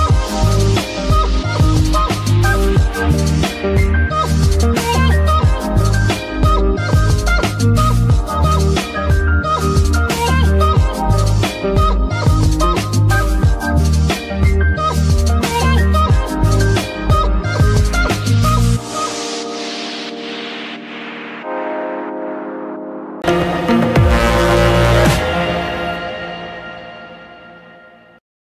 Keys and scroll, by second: 1.9 alt+g, 2.0 alt+r, 6.1 g, 7.2 Escape, 8.2 g, 8.9 Escape, 9.2 r, 9.5 x, 10.8 r, 11.1 x, 12.2 z, 13.6 r, 13.8 x, 18.9 g, 19.9 r, 20.1 x, 20.9 Escape, 21.3 a, 22.0 alt+g, 22.1 r.